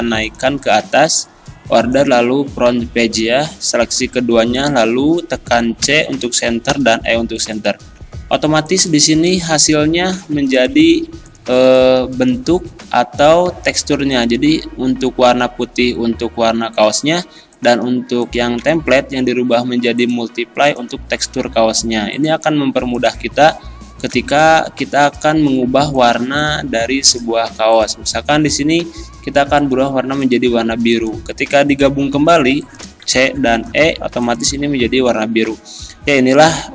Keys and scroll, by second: 5.9 c, 6.7 e, 8.4 z, 18.6 x, 24.1 c, 24.5 e, 33.1 c, 33.6 e.